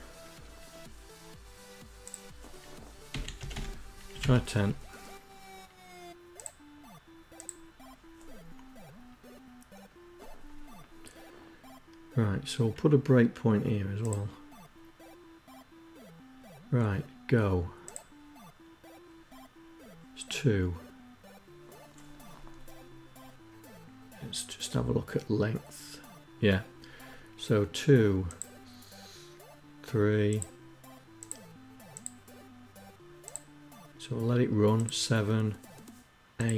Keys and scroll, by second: 0.9 Delete, 0.9-1.8 typing, 1.9 Down, 2.0 Up.